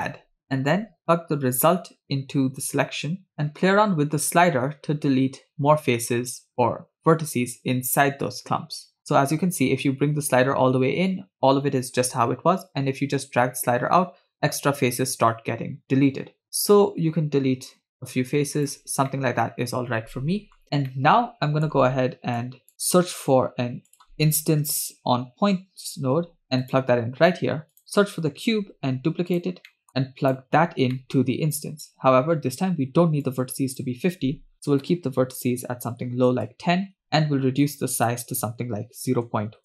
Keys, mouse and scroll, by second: 1.0-2.7 drag, 3.3-18.8 drag, 3.3 middle click, 19.1-20.6 middle drag, 20.6 scroll down 2, 20.9 middle click, 22.4-22.7 drag, 23.1 shift+a, 26.4 BackSpace, 27.7 click, 28.6 shift+d, 29.7 middle click, 30.0 click, 30.6-31.2 scroll up 2, 31.0 middle click, 31.6 drag, 32.1-32.8 scroll up 1, 32.8 scroll up 1, 33.3-36.4 shift+drag, 37.6-39.6 shift+drag.